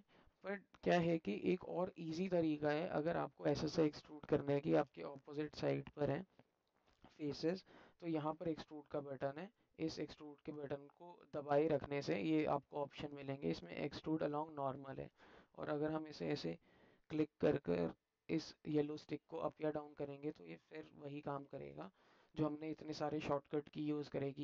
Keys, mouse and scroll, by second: 0.5 alt+middle click, 1.7 ctrl+z, 3.3 middle click, 4.6 shift+click, 5.3 alt+middle click, 6.5 alt+click, 9.5-14.5 drag, 16.0-18.7 drag, 18.7-21.3 middle drag, 21.9-23.4 alt+drag.